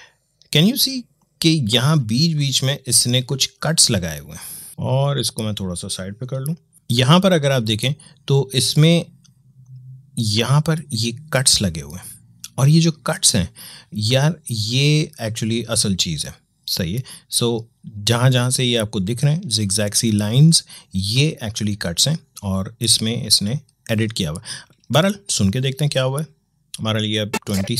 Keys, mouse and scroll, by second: 1.0-6.0 drag.